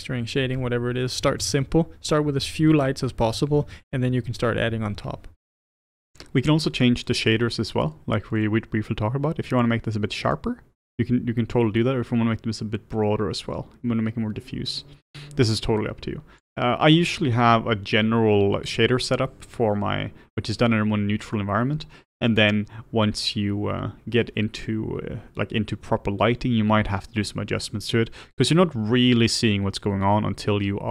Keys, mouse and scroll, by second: 1.5 click, 10.0-12.7 drag.